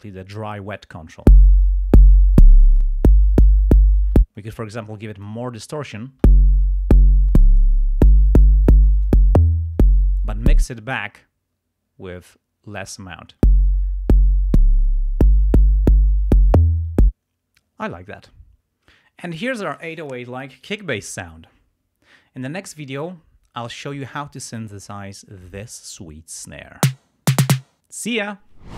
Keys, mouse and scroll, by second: 1.2 space, 1.7 click, 1.8-3.1 drag, 4.1 space, 4.4-5.5 drag, 6.1 space, 7.0 click, 8.7 click, 10.5 space, 13.3 space, 17.0 space, 18.7 scroll up 2, 22.5-23.4 scroll up 4, 27.2 scroll up 2.